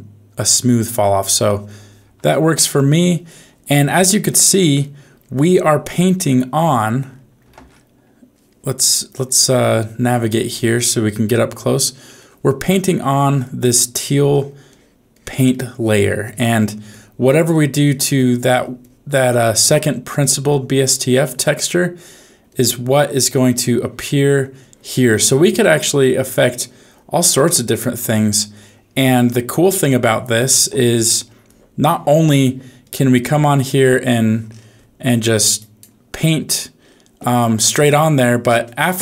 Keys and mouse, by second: 0.8 click, 1.0 click, 2.2 ctrl+z, 2.8 ctrl+z, 5.3 click, 6.6 click, 7.6 ctrl+z, 8.0 right click, 8.8 middle click, 9.5 shift+middle click, 10.2 ctrl+middle click, 10.3 ctrl+click, 10.7 ctrl+middle click, 11.4 middle click, 11.7 middle click, 12.6 click, 13.3 click, 13.6 click, 13.9 click, 14.3 click, 14.7 click, 15.1 click, 15.5 click, 15.8 click, 16.2 click, 16.5 click, 16.8 click, 17.2 click, 17.5 click, 17.8 click, 18.1 click, 18.5 click, 18.8 click, 19.1 click, 19.4 click, 19.8 click, 20.5 click, 20.8 click, 21.2 click, 21.6 click, 22.0 click, 22.4 click, 22.9 click, 23.3 click, 23.7 click, 24.6 click, 25.0 click, 25.4 click, 25.8 click, 26.2 click, 26.5 click, 27.2 click, 27.6 click, 28.0 click, 28.5 click, 29.0 click, 29.5 click, 29.8 click, 30.4 click, 30.9 click, 31.4 click, 31.8 click, 32.4 click, 32.8 click, 33.2 click, 34.5 middle click, 35.1 middle click, 36.3 middle click, 37.3 middle click.